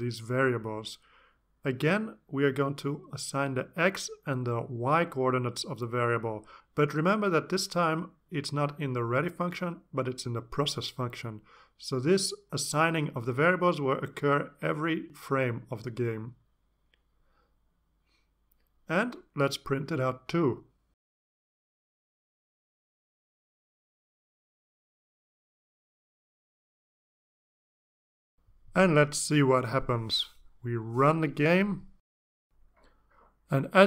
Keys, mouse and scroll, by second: 0.1 space, 1.6-8.4 typing, 4.1 Return, 9.1 Return, 10.1 y, 10.5 space, 10.7 =, 11.8-20.3 typing, 21.1 Return, 21.4-28.3 typing, 29.7-30.2 scroll down 2, 31.5 click.